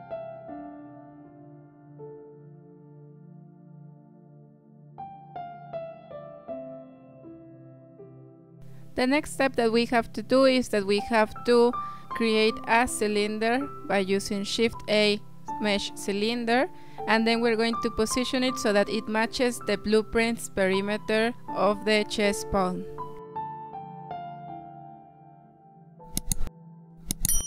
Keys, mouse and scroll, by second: 0.1 g, 2.3-2.6 scroll up 6, 2.6 shift+middle click, 3.2 scroll up 4, 3.5-3.9 shift+middle drag, 3.9 scroll up 1, 4.2 g, 5.1 g, 8.2 shift+a, 13.4-13.8 scroll down 4, 13.8 click, 14.3 s, 16.2 scroll up 3, 16.7 s, 17.5 g, 20.0 scroll up 3, 20.5-23.1 shift+middle drag, 23.1 s, 25.7 z, 26.2 g.